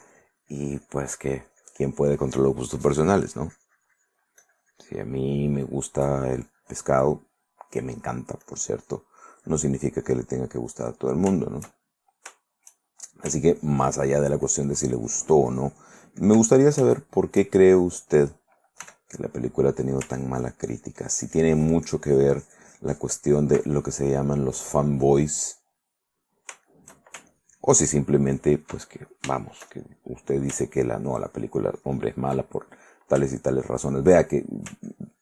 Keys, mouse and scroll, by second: 5.5-8.5 drag, 9.4-10.8 drag, 10.9 middle click, 11.6 shift+middle click, 12.6 shift+middle click, 13.5-16.6 ctrl+drag, 17.0 ctrl+shift+middle click, 17.2 ctrl+shift+middle click, 17.9 shift+middle click, 19.0 f, 19.3 click, 20.3-23.8 ctrl+drag, 24.7 click, 25.9 click, 26.7 shift+click, 27.5-29.0 ctrl+shift+drag, 29.4 ctrl+shift+click, 29.6 ctrl+shift+click, 29.8 shift+middle click, 30.8-32.6 ctrl+drag, 32.7 ctrl+middle click, 33.5 ctrl+click, 35.0-35.2 ctrl+drag.